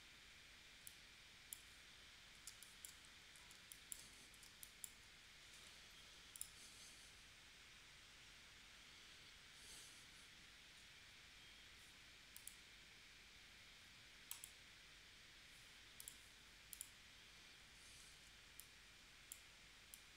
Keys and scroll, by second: 2.5 space, 3.5 space, 4.4 space, 5.6 v, 18.1 shift+c.